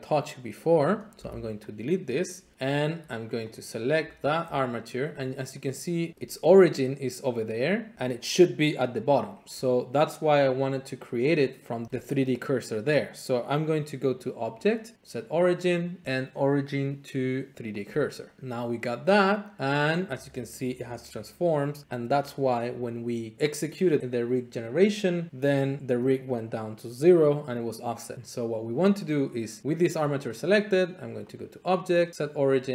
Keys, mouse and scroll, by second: 0.8 middle click, 1.2 x, 2.0 click, 2.8 click, 3.5 click, 4.1 Tab, 5.5 middle click, 6.4 middle click, 7.4 scroll, 14.5 click, 17.8 click, 18.8 click, 19.7 click, 29.8-30.8 drag, 31.3 click.